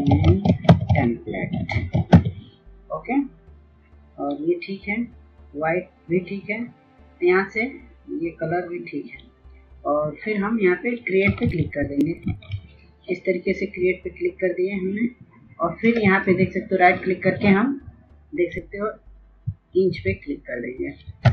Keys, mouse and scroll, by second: 0.0-0.2 typing, 1.7-2.4 typing, 3.3-6.9 drag, 10.8 ctrl+s, 11.7 ctrl+s, 12.1 click, 12.2 right click, 17.9 s, 19.6 click.